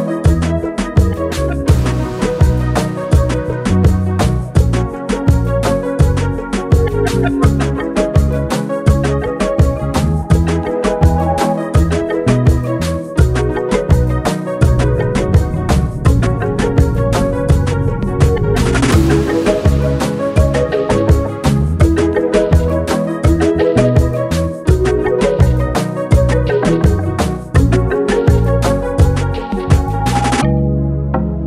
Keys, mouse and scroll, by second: 1.5 ctrl+z, 2.9-6.9 alt+drag, 6.9 ctrl+d, 9.1 ctrl+d, 11.2-13.5 drag, 15.0 alt+scroll up 1, 15.8-18.0 alt+drag, 18.0-27.0 alt+drag, 27.0 F7, 28.1-31.4 drag.